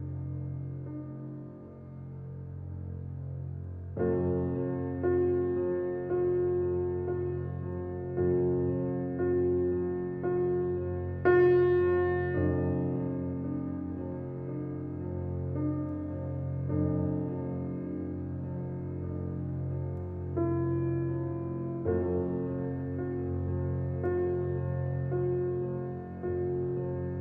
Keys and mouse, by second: 0.0-3.7 typing, 10.7-17.6 typing, 19.7-26.2 typing.